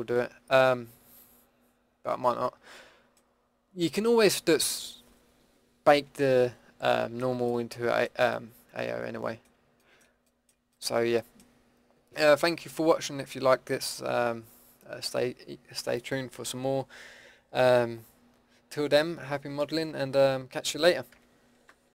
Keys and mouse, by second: 4.6-6.9 middle drag, 10.2-10.7 middle drag, 10.8-21.9 middle drag.